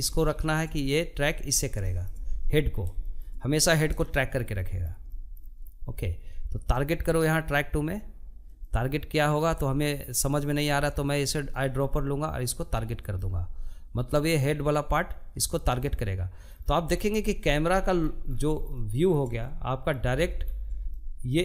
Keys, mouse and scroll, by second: 0.5 shift+middle click, 1.4 scroll down 1, 1.7-9.7 shift+middle drag, 9.7 click, 15.1-17.2 scroll down 16, 17.4-18.8 shift+middle drag, 18.8-19.6 scroll up 4, 19.6-20.7 shift+middle drag, 20.7-21.4 scroll up 1.